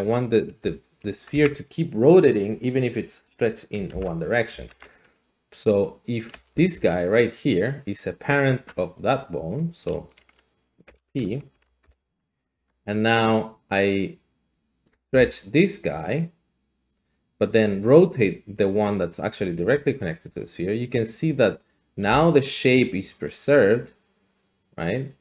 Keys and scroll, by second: 0.6 r, 1.3 Escape, 3.9 ctrl+z, 4.5 ctrl+z, 6.3 g, 6.7 Escape, 8.6 Tab, 10.9 ctrl+p, 11.5 Down, 11.8 Return, 12.5 Tab, 14.9 typing, 19.5 r, 22.1-25.2 d.